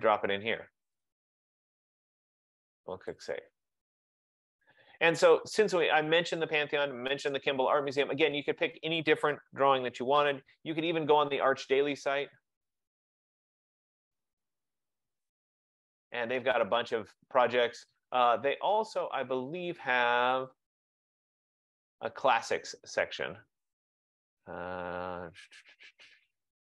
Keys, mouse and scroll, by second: 0.2 click, 1.1 click, 1.3 click, 3.4 click, 8.1 click, 11.2-14.9 typing, 18.0-18.7 typing, 20.6-25.6 drag.